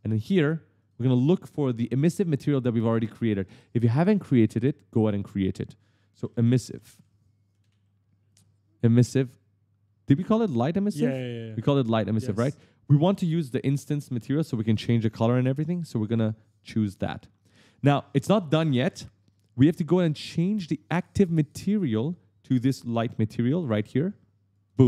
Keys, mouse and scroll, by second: 0.6 click, 5.8-8.0 typing, 9.9 scroll down 1, 10.5 scroll down 1, 11.0-11.4 scroll down 1, 11.5-12.0 scroll up 2, 12.3 scroll down 1, 16.7 click, 23.2 click, 24.3 click.